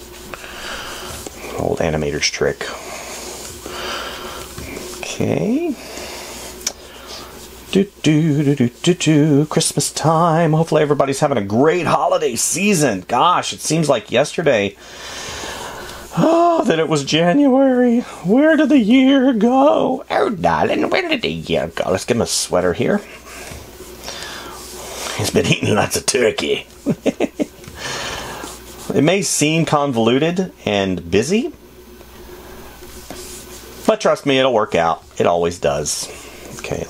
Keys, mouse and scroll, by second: 10.5 space, 13.2 space.